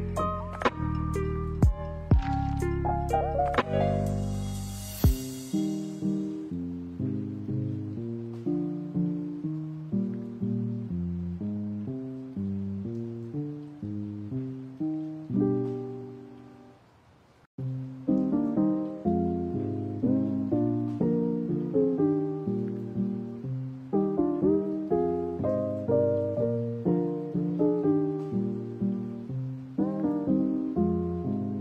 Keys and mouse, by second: 0.9 a, 1.1 a, 1.3-3.1 middle drag, 3.6 middle click, 4.8 middle click, 6.0-6.4 drag, 6.7 middle drag, 7.4 a, 7.6 a, 9.1 right click, 9.7 middle drag, 11.0 right click, 12.4-13.0 drag, 13.8 middle click, 14.5 right click, 14.8 middle click, 16.0 right click, 16.9 right click, 18.9-19.3 drag, 19.6 shift+middle drag, 19.9 middle drag, 20.6 shift+middle click, 23.2 click, 24.3 click, 24.8 middle click, 25.5-25.9 middle drag, 27.3-28.2 middle drag, 28.6 middle click, 29.7-31.6 drag.